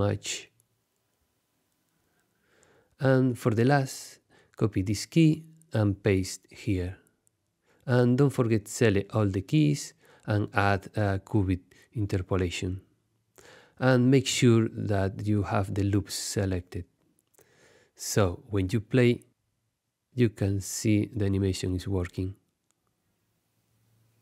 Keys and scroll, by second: 4.7 super+c, 6.8 super+v, 18.1 space.